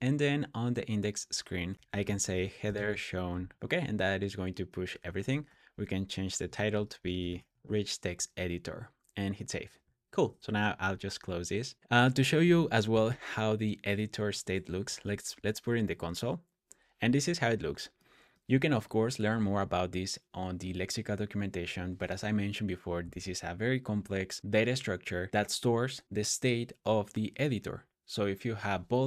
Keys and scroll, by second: 1.5-3.6 typing, 5.3 typing, 6.3 Tab, 6.4-7.7 typing, 10.5 super+j, 11.7 super+w, 12.8 o, 14.1 Tab, 14.7 super+s, 15.0 super+j.